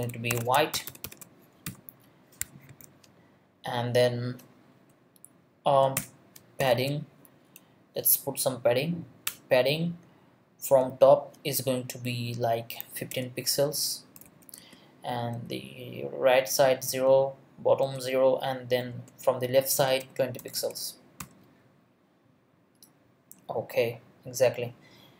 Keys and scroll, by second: 0.0-2.3 typing, 2.7 Escape, 6.0 Return, 6.3-7.2 typing, 9.3 Return, 10.6 space, 12.7-15.3 typing, 16.9 space, 17.8 0, 19.6-21.2 typing.